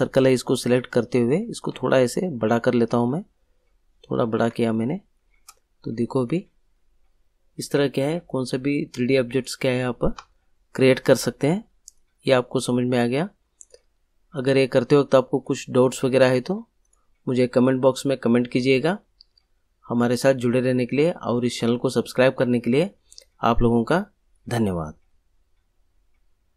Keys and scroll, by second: 10.7 ctrl+g.